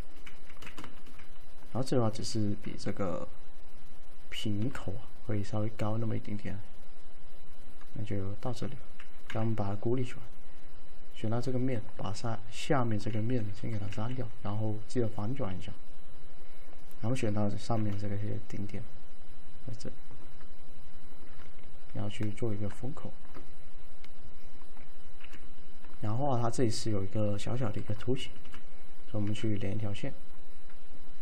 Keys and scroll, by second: 0.5 f, 0.9 F3, 2.3 w, 9.4 c, 13.3 d, 14.0 ctrl+a, 17.9 t, 25.3 t, 28.5 v.